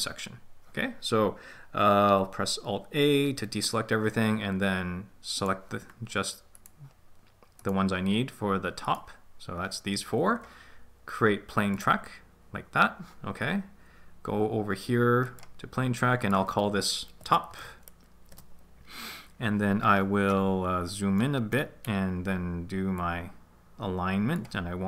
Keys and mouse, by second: 3.4 alt+a, 5.3 right click, 6.5 shift+right click, 7.5-9.7 shift+right drag, 11.7 click, 15.2 click, 16.2-18.3 drag, 21.1 middle click, 22.9 click.